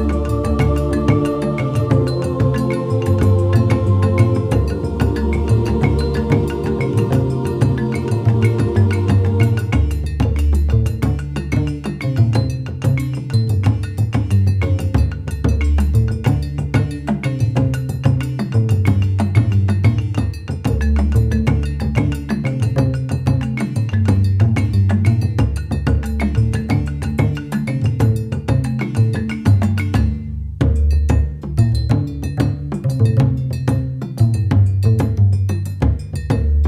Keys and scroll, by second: 0.0-0.4 typing, 5.6 shift+l, 5.7 ctrl+s, 23.5 ctrl+s, 23.5 ctrl+z.